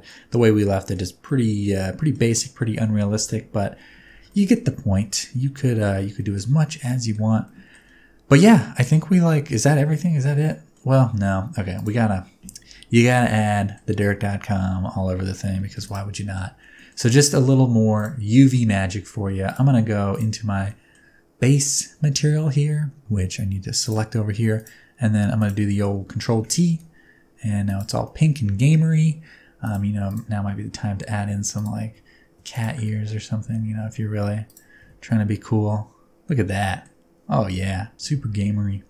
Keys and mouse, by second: 0.1-0.9 middle drag, 1.2-2.1 middle drag, 3.2 KP_0, 4.3 shift+middle drag, 5.0 shift+middle click, 5.5-5.9 ctrl+middle drag, 6.2 shift+middle click, 6.7-7.1 ctrl+middle drag, 7.5 shift+middle click, 10.4 middle drag, 11.7 click, 13.2 middle click, 15.8 click, 16.3 middle click, 16.8 middle click, 17.9 click, 20.8 middle click, 23.8 click, 25.4 click, 26.3 ctrl+t, 26.6 g, 28.1 middle click, 29.6 click, 30.1 click, 30.7 Tab, 31.4 3, 32.9 middle click, 33.8 g, 35.0 Tab, 35.4-36.8 middle drag, 37.9 ctrl+z, 38.4 ctrl+z.